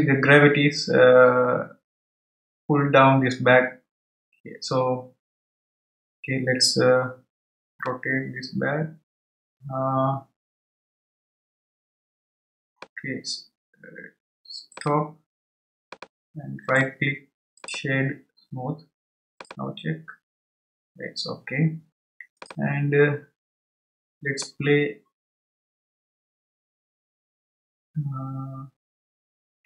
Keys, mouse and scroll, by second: 8.0-11.2 middle drag, 14.9-16.6 drag, 16.6-19.3 right drag, 19.3-27.5 drag.